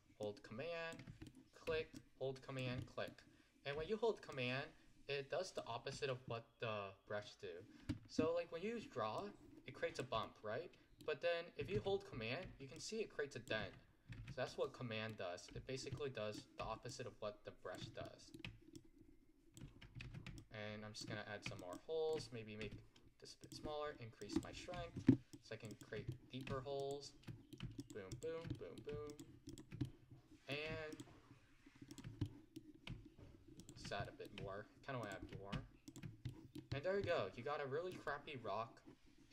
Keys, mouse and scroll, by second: 0.3-1.3 drag, 1.3 middle click, 2.0 click, 2.9-4.4 middle drag, 4.4-10.3 drag, 10.3-11.8 middle drag, 11.8 z, 12.8-14.2 drag, 14.2 z, 14.7-16.9 middle drag, 16.9-18.1 drag, 18.1 middle click, 18.8-20.1 drag, 20.1 z, 20.4-22.7 drag, 22.7 f, 24.3-26.2 drag, 26.2 middle click, 26.8 click, 27.3 middle click, 27.9 click, 28.5 scroll down 1, 28.6 middle click, 29.1 click, 29.9 middle click, 31.0-32.3 drag, 32.3-33.6 middle drag, 33.6 click, 34.1 middle click, 35.1-36.3 drag, 36.3 middle click, 36.8-37.1 scroll down 4, 37.1-39.3 middle drag.